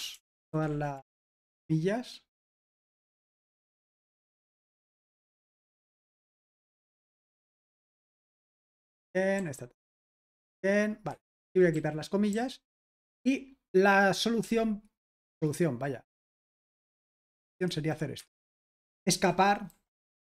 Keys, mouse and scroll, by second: 0.0-2.3 typing, 4.7-10.1 typing, 11.1 Escape, 11.4-14.6 typing, 17.4-18.1 typing, 18.2 Escape, 19.6-20.3 typing.